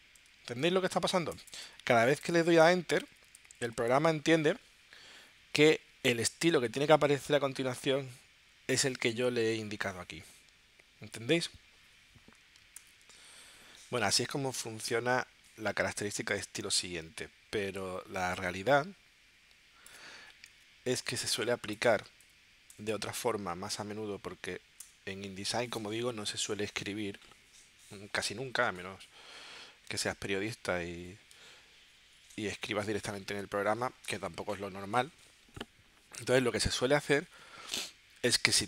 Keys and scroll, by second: 0.0-1.4 typing, 2.9-3.8 typing, 20.5 BackSpace, 24.8 Delete.